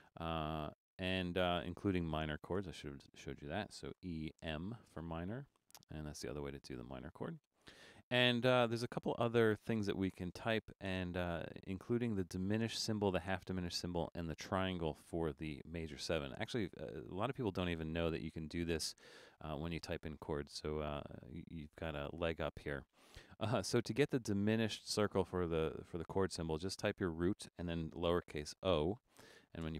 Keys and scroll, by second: 1.1 BackSpace, 1.4 BackSpace, 4.0-4.9 typing, 6.5 BackSpace, 7.0-10.9 BackSpace, 27.0 shift+d, 28.7 o, 29.6 space.